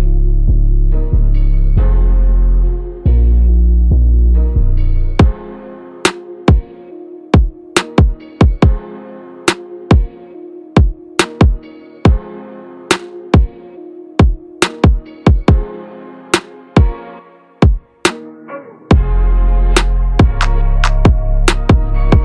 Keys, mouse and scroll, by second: 0.1 click, 1.9 p.